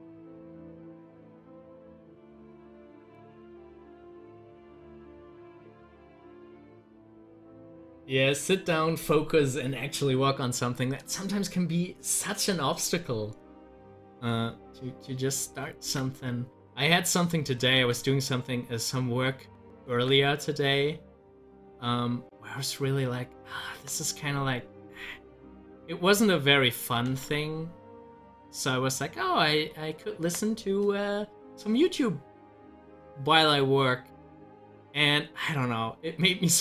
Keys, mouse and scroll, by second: 7.7 click, 12.5 double click, 14.7 click, 16.5-17.8 drag, 17.8 z, 18.4-20.0 drag, 20.0 ctrl+z, 25.0-27.1 drag, 27.1 ctrl+z.